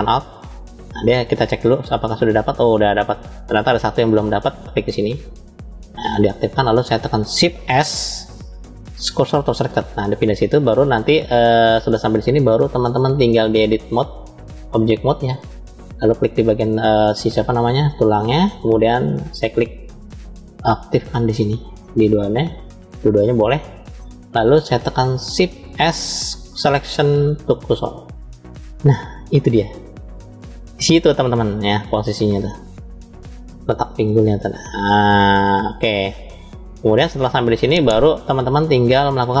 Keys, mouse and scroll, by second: 0.9-3.7 middle drag, 5.1 shift+click, 6.1-7.1 middle drag, 7.7 shift+s, 10.5-11.9 middle drag, 13.1-15.1 drag, 16.3 click, 18.0-19.0 drag, 21.2-24.0 drag, 25.5 shift+s, 30.8-31.2 scroll down 2, 31.8-36.0 middle drag, 31.8 scroll down 1, 36.3-37.6 scroll up 2, 37.9 shift+middle click.